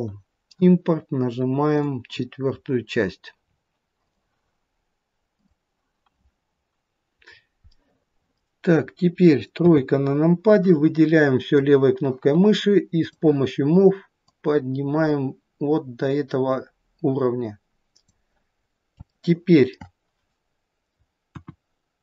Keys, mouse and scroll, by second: 7.3-8.8 scroll up 3, 7.8 middle click, 8.8 middle click, 8.8-9.6 scroll down 1, 9.6 scroll down 1, 9.6 KP_3, 10.6 click, 13.1 click, 19.2 alt+middle click, 21.3 KP_1.